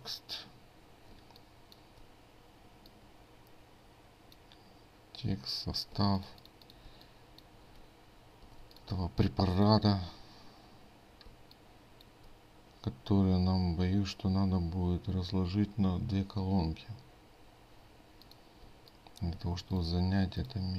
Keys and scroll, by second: 1.2 ctrl+space, 6.0 ctrl+space.